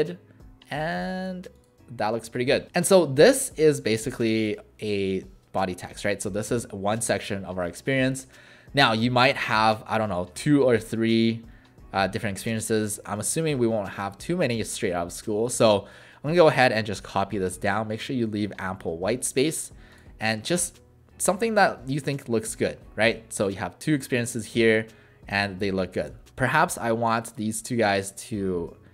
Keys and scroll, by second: 2.7 w, 6.6 ctrl+z, 20.2 alt+shift+w.